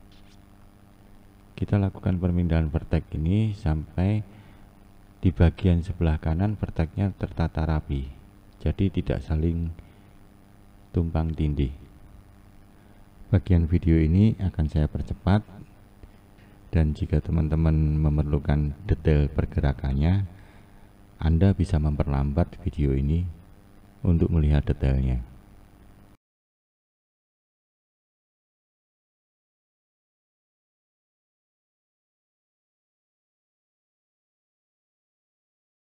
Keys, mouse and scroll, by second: 1.0 click, 4.7 click, 5.8 click, 8.6 click, 10.1 click, 14.0 click, 15.3 click, 18.7 click, 19.9 click, 23.6 click, 24.8 click, 26.4 shift+middle click, 27.0 click, 27.1 click, 27.6 click, 27.7 click, 28.0 click, 28.0 click, 28.2 click, 28.2 click, 28.4 click, 28.5 click, 28.6 click, 28.7 click, 28.8 click, 28.9 click, 29.1 click, 29.2 click, 29.4 click, 29.8 click, 29.9 click, 30.0 click, 30.1 click, 30.4 click, 30.6 click, 30.9 click, 31.0 click, 31.3 click, 31.4 click, 31.8 click, 31.9 click, 32.5 click, 32.6 click, 33.0 click, 33.1 click, 33.7 click, 33.8 click, 34.3 click, 34.4 click, 34.7 click, 34.8 click, 35.1 click, 35.3 click, 35.4 click.